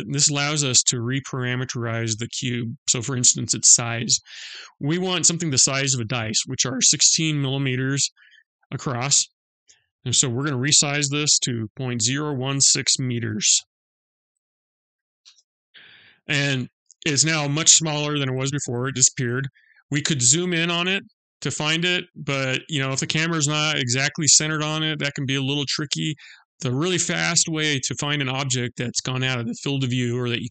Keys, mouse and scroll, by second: 9.4 click, 19.8 click, 20.3-22.1 scroll up 11, 22.1-22.5 scroll down 2, 22.7 scroll down 1, 23.6 scroll up 2, 24.0-25.6 scroll down 14, 26.1-26.6 scroll up 1, 26.7-27.4 scroll down 1, 27.4-27.8 scroll up 1.